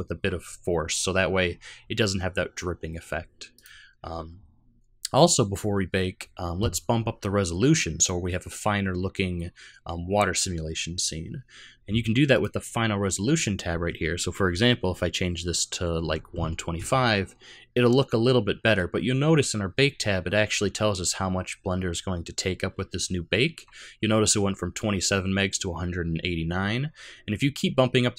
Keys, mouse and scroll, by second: 3.5 click, 5.2 middle click, 11.2-12.3 scroll down 2, 12.3 click.